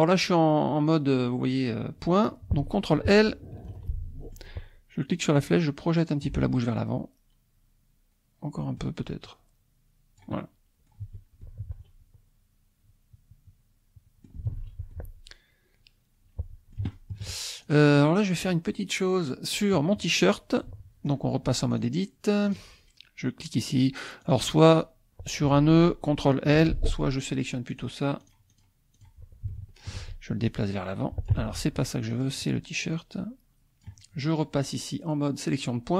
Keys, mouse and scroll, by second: 2.3 click, 3.7 ctrl+l, 3.9 ctrl+click, 5.3-6.4 drag, 7.9-9.0 drag, 9.2-11.1 drag, 11.0 Tab, 11.4-14.4 drag, 14.5 ctrl+s, 14.9-17.4 ctrl+drag, 17.6 shift+click, 18.0 shift+click, 21.9 click, 22.4 click, 22.7-24.4 middle drag, 24.4 click, 26.6 ctrl+l, 27.7 click, 28.2 click, 28.8 middle click, 28.9 click, 29.5 shift+click, 30.5 click, 31.4 ctrl+z, 32.3 click, 32.8-34.0 drag.